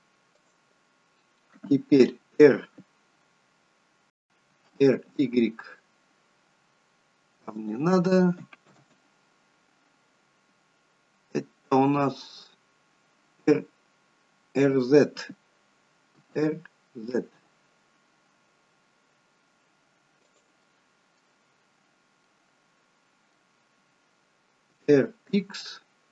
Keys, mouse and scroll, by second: 4.4 r, 8.7 ctrl+z, 16.1 r, 20.6 middle click, 21.6-22.2 scroll up 4, 22.2 middle click, 24.7 r.